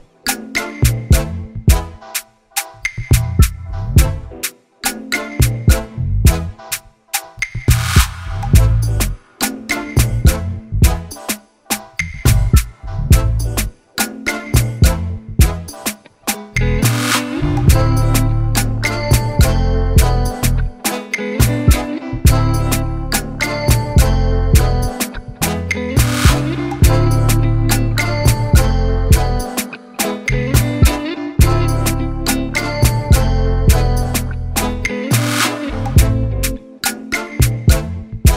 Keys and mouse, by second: 0.9 click, 2.2 Return, 3.7 click, 5.5 click, 8.2 click, 9.9 click, 10.4 Return, 11.9 click, 13.2 click, 13.9 click, 15.7 click, 16.9 click, 20.3 click, 22.0 click, 23.5 click, 24.1 Return, 25.5 click, 27.9 click, 29.5 click, 30.7 ctrl+z, 32.9 Return, 33.8 click, 35.0 Return, 35.8 click, 36.9 click, 37.5 click, 38.2 ctrl+t.